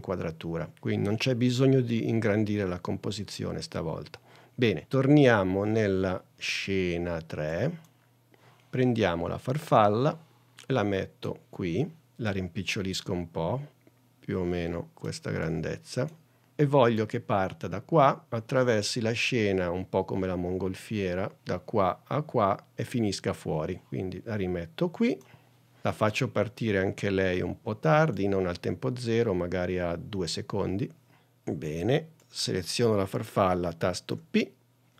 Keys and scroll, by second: 34.3 p.